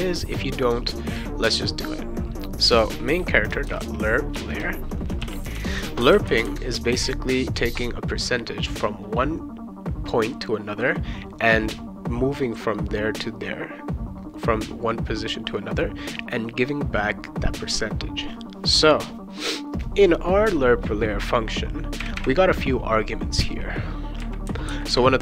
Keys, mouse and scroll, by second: 0.1 click, 1.1 click, 3.4-6.0 typing, 4.3 Return, 6.1 ctrl+s, 22.0 ,, 22.2 ,, 24.2 ,.